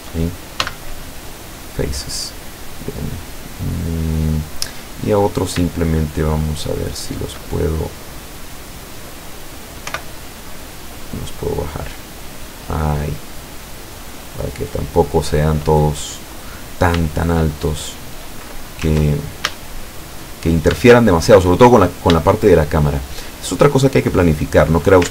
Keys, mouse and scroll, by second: 0.7 x, 1.3 click, 2.0-4.9 middle drag, 5.3 right click, 5.8 shift+right click, 6.2 shift+right click, 6.8-7.4 shift+right drag, 7.5-8.7 shift+middle drag, 9.9 o, 10.3-13.3 drag, 13.5-15.4 middle drag, 16.1 right click, 16.7 shift+right click, 17.1 shift+right click, 17.6 shift+right click, 19.5 ctrl+a, 19.9-20.4 middle drag, 20.4-20.9 scroll up 1, 20.9 shift+middle click, 21.9 shift+right click, 22.3 shift+right click, 22.7-23.3 shift+right drag, 23.7-25.1 shift+drag.